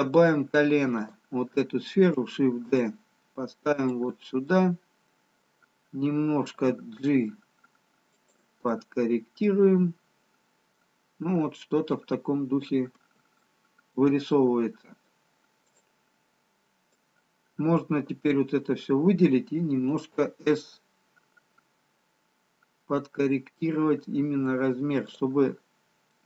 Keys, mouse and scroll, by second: 0.9 click, 2.8 shift+d, 4.6 middle click, 6.8 g, 8.9 middle click, 13.4 shift+middle click, 15.1 middle click, 16.2 click, 17.2 click, 19.7 s.